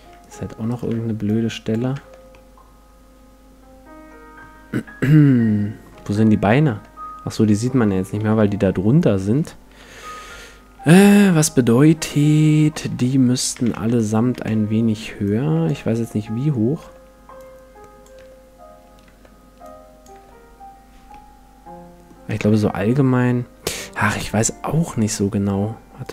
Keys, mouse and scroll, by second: 0.2-2.5 right drag, 1.2-3.2 drag, 2.0 Tab, 2.3-4.1 middle drag, 5.0-6.7 middle drag, 6.0 Tab, 6.7 Tab, 7.5-9.4 middle drag, 8.2 z, 8.6 z, 9.8 Tab, 11.4 KP_1, 12.6 Tab, 12.9 Tab, 13.6 a, 13.7 a, 14.3 a, 15.2-17.0 drag, 15.8 Tab, 16.8 Tab, 17.4-19.4 drag, 18.2 Tab, 19.0 Tab, 19.6-21.4 drag, 20.2 Tab, 21.1-22.3 middle drag, 22.3 a, 24.8-26.1 drag.